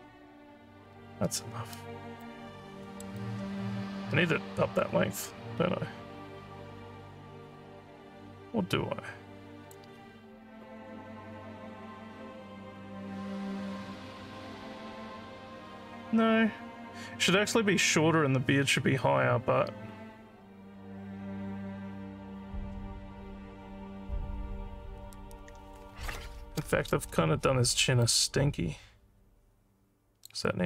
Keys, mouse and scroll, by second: 1.8 alt+click, 2.6 scroll down 2, 2.9 alt+middle click, 3.2-9.8 alt+drag, 28.0-30.3 alt+drag.